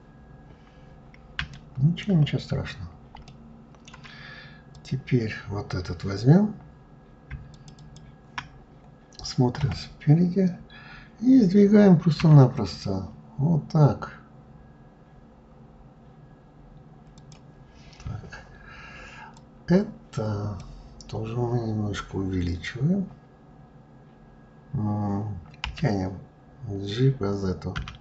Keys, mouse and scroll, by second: 0.5-1.2 scroll down 3, 1.2 shift+middle click, 2.1-2.5 scroll up 2, 2.9-4.4 shift+middle drag, 4.4 click, 7.2 shift+click, 7.4 shift+click, 9.2 KP_1, 11.8 s, 19.0 click.